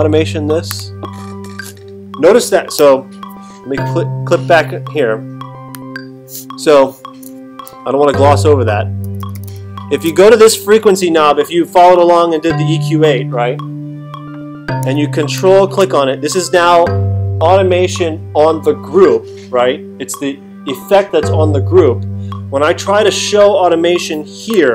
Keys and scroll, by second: 7.7 alt+super+8, 9.0 alt+super+=.